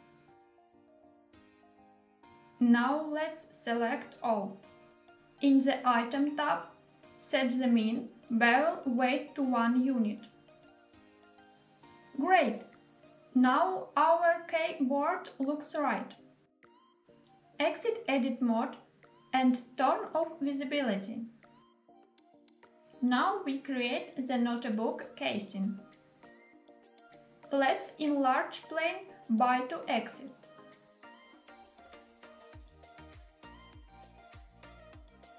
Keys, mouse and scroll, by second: 1.4 click, 2.4 a, 4.9 click, 7.0-10.3 drag, 11.9 click, 12.6-16.5 middle drag, 17.7 Tab, 22.0 click, 23.0 shift+a, 27.0 shift+middle click, 27.0-27.4 scroll down 1, 27.4 s, 27.9 x, 31.1 click, 31.7-32.6 middle drag, 33.2 s, 33.7 y.